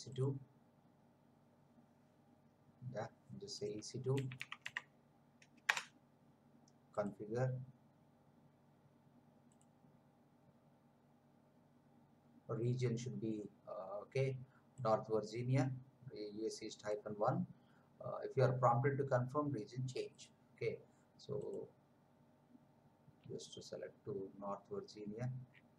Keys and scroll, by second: 3.9-5.1 typing, 5.6 Return.